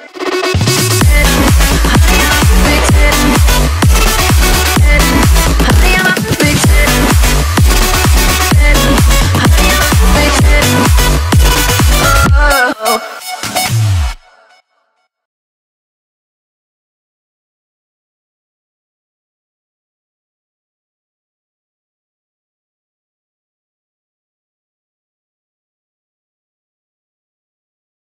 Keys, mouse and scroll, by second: 0.4-1.8 scroll up 1, 2.1 m, 2.5 click, 3.2 space, 4.0 scroll up 1, 4.3 m, 5.0 click, 6.2 Left, 6.5-6.9 scroll down 1, 8.2 scroll up 1, 9.3 click, 9.4 space, 9.5 scroll down 1, 10.5 middle click, 10.9 scroll down 1, 11.4 middle click, 11.5 scroll down 1, 12.2-12.5 scroll up 1, 12.9 shift+middle click, 13.8 middle click, 14.3-15.2 scroll up 1, 15.6 middle click, 16.1 scroll up 1, 16.9 scroll up 1, 17.1 m, 17.8 click, 19.0 space, 19.2-19.8 scroll down 1, 20.4-21.8 middle drag, 21.8-22.2 scroll down 1, 23.7-26.2 shift+middle drag, 26.2 scroll down 1, 26.5 click, 27.5 p, 27.8 click.